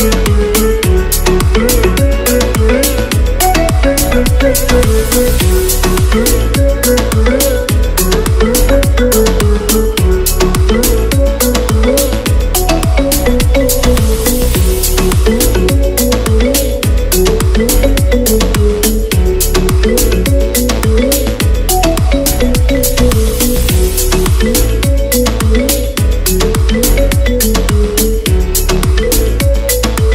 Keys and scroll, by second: 11.5-15.1 typing, 18.5 shift+BackSpace.